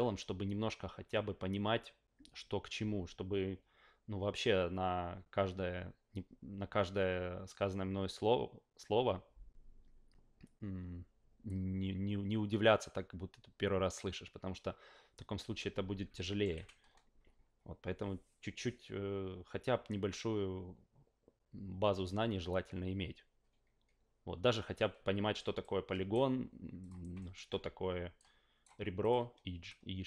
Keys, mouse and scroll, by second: 16.2 alt+middle click, 16.5 f, 25.6-26.1 right drag, 26.8 click, 27.2 alt+middle click, 28.2-28.6 right drag, 29.0 click, 29.7-30.0 right drag.